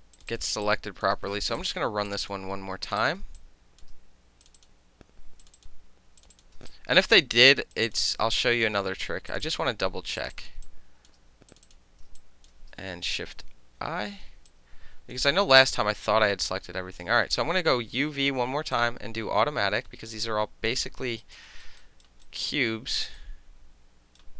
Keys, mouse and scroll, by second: 0.2 shift+click, 0.7-1.1 alt+drag, 1.1 alt+shift+middle click, 1.5 shift+click, 1.6 shift+click, 1.7-2.1 shift+middle drag, 2.1 shift+click, 2.2 shift+middle click, 2.2 shift+click, 2.3-2.9 shift+middle drag, 2.9 shift+click, 3.0 shift+middle click, 3.4-3.8 alt+drag, 3.8-4.6 alt+middle drag, 4.5 shift+click, 4.6 shift+click, 4.7-5.4 shift+middle drag, 5.4 shift+click, 5.5 shift+middle click, 5.6 shift+click, 5.7-6.3 shift+middle drag, 6.2 shift+click, 6.3 shift+click, 6.4 alt+shift+middle drag, 6.7 alt+click, 7.0-7.9 alt+shift+middle drag, 7.8 shift+click, 7.9 shift+click, 8.0 alt+shift+middle click, 8.3 alt+click, 8.6 alt+middle click, 9.3 shift+click, 9.4 shift+click, 9.5 shift+middle click, 10.2 shift+click, 10.3 shift+middle click, 10.3 shift+click, 10.4 shift+middle click, 10.7 alt+click, 11.5 shift+click, 11.7 shift+click, 12.2 alt+click, 12.5-14.5 alt+middle drag, 13.8 shift+i, 14.5 alt+click, 15.3 alt+right click, 15.7-17.0 alt+drag, 17.3 alt+space, 18.8-20.7 drag, 21.2 alt+right click, 21.5 alt+middle click, 21.8 alt+right click, 22.3 alt+right click, 23.2-24.2 alt+right drag.